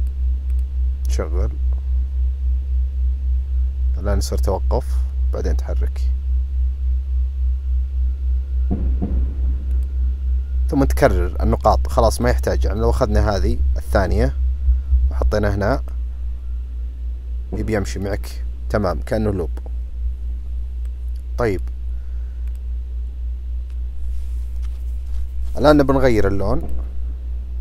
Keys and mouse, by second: 0.5 click, 9.8-11.7 drag, 12.2 click, 13.5 ctrl+c, 14.8 ctrl+v, 15.8-18.1 drag, 18.9 click, 19.8 Delete, 20.8-21.6 drag, 22.4 click.